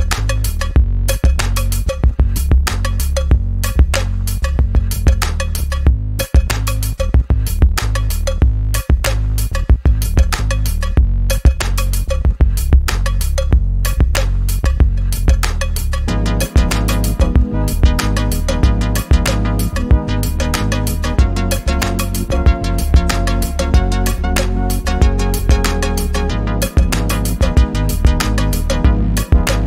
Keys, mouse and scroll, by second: 5.7-6.3 drag, 9.6 shift+scroll down 1, 10.3 ctrl+scroll down 1, 12.0 v, 12.5 click, 14.5 ctrl+d, 14.8-17.0 drag, 17.7 ctrl+d, 20.6 z, 21.0 z, 21.3-21.9 click, 21.9 v, 22.5-23.4 click, 23.5 ctrl+scroll down 1, 24.9-25.6 click, 26.0 ctrl+z, 26.4-27.3 drag.